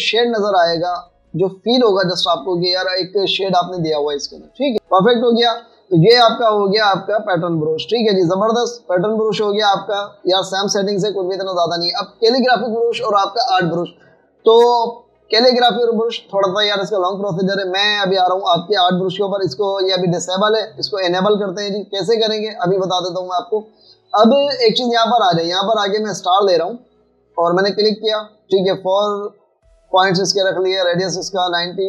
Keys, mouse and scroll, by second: 0.3 alt+scroll up 1, 3.8 v, 24.6 right click.